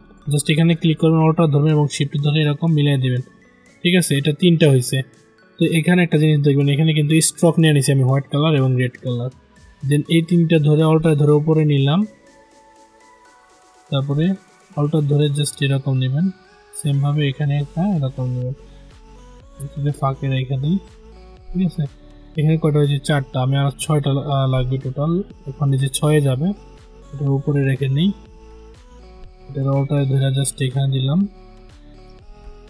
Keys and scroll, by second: 31.9 ctrl+z.